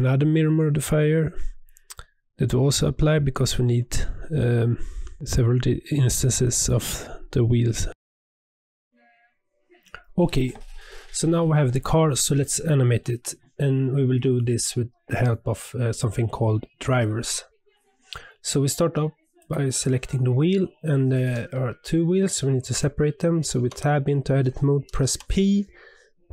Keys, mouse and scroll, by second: 0.9 click, 1.8 click, 2.1 ctrl+a, 2.4 scroll down 1, 2.4-3.0 middle drag, 3.0 click, 3.3 shift+middle click, 3.7 g, 4.8 shift+d, 6.3 scroll down 1, 6.4 middle click, 6.8 Tab, 7.0 Tab, 7.1 click, 7.2 middle click, 7.6-8.9 scroll up 2, 7.7 shift+middle click, 19.4 click, 23.5 Tab, 25.0 p.